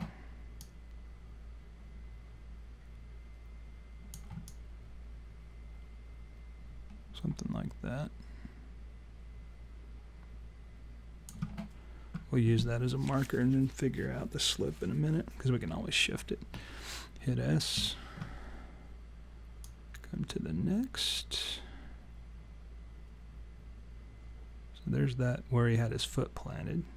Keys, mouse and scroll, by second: 0.6 click, 4.4 alt+click, 17.8 s, 19.7 click.